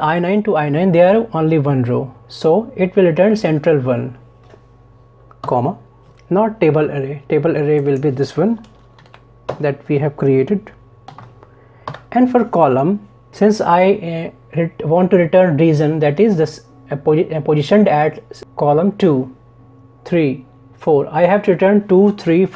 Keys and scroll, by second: 9.0 ctrl+shift+Down, 9.5 ctrl+shift+Right.